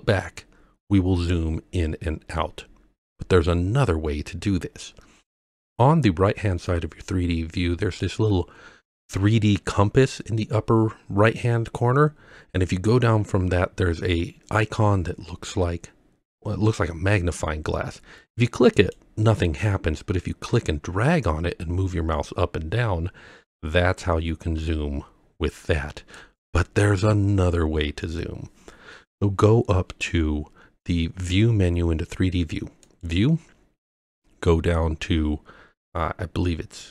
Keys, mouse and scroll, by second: 0.9-1.8 scroll up 6, 1.8-2.5 scroll down 5, 2.5 scroll up 2, 18.8 click, 21.2-26.2 drag, 32.9-36.9 drag.